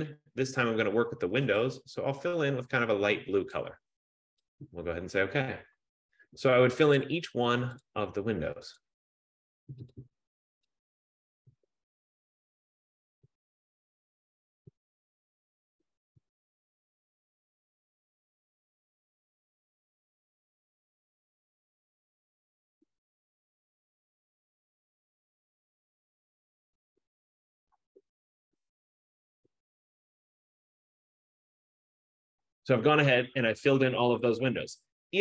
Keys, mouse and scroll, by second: 1.9 click, 3.6 click, 4.8 click, 7.2 click, 8.0 click, 9.3 click, 10.0 click, 11.1 click, 11.9 click, 12.9 click, 13.5 click, 14.4 click, 15.4 click, 16.2 click, 17.4 click, 18.3 click, 19.4 click, 20.0 click, 20.9 click, 21.7 click, 22.6 click, 23.4 click, 25.0 click, 25.5 click, 26.5 click, 27.1 click, 27.3 click, 27.6 click, 28.4 click, 29.5 click, 30.2 click, 31.4 click, 31.6 click.